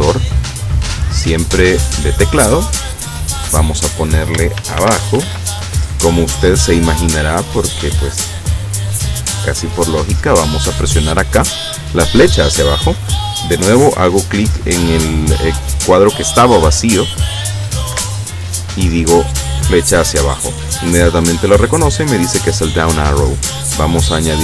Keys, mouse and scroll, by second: 2.1 click, 3.3 click, 4.6-5.3 typing, 7.5 click, 8.2 click, 10.2 click, 18.0 Down, 24.1 click.